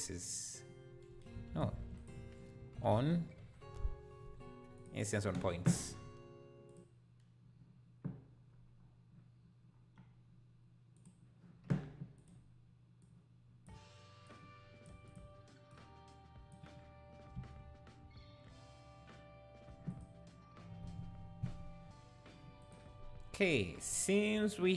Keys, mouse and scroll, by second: 1.5 ctrl+x, 12.2-14.9 drag, 15.1-21.9 drag.